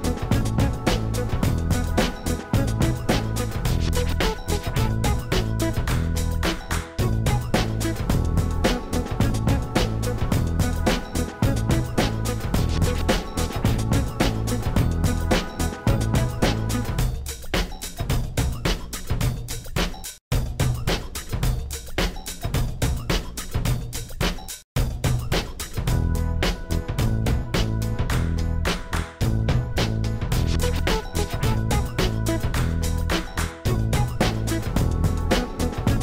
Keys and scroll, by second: 6.6 shift+a, 12.2 Tab, 12.9 s, 14.2 Tab, 15.1 7, 18.5 g, 20.2 Tab, 20.8 1, 21.2 shift+z, 22.6 s, 25.8 s, 28.6 s, 31.3 shift+s, 34.5 shift+z, 35.3 3.